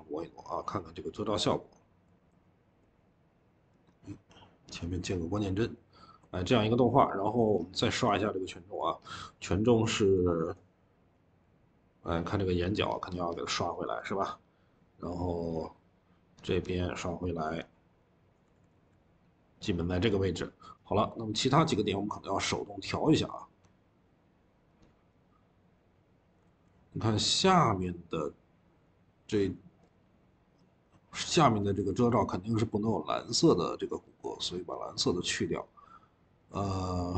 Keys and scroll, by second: 3.6 Escape, 3.6 typing, 6.3 e, 18.6 ctrl+z, 26.3 ctrl+z.